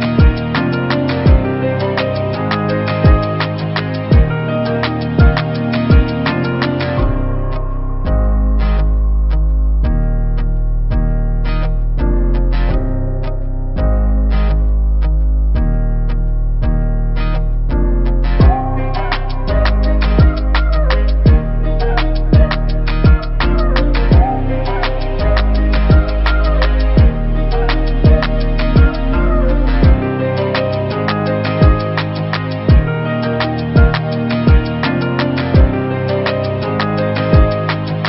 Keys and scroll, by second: 11.7 ctrl+t, 19.3 ctrl+t.